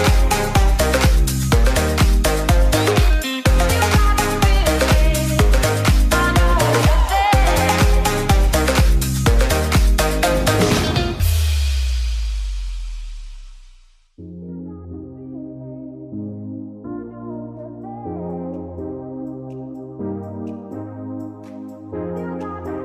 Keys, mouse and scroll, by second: 2.6-12.4 drag, 16.8-22.8 drag.